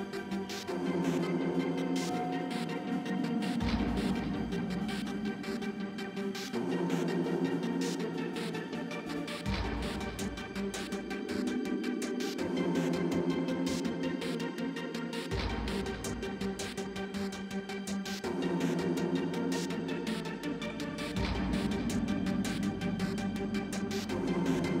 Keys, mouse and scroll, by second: 7.3 Tab, 8.2 a, 9.9 shift+a, 11.5 g, 13.6 t, 14.7 t, 15.4 a, 17.9 x, 19.0 shift+d, 19.7 Tab, 20.7 ctrl+b, 21.3 Tab, 21.8 Tab, 22.2 Tab, 22.5 Tab, 23.4 ctrl+r.